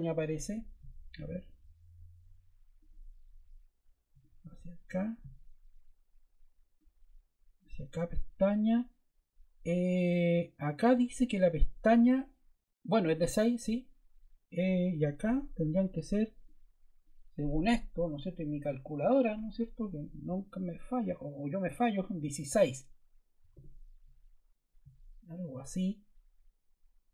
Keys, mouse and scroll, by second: 23.2-23.9 typing.